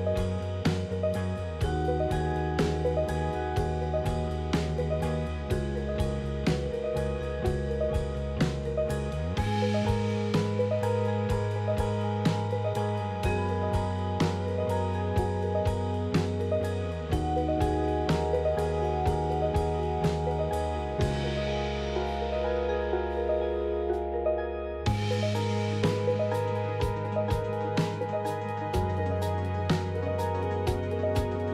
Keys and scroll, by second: 4.9 f, 13.7 f, 15.5 alt+x, 16.9 q, 17.3 z, 28.4 2.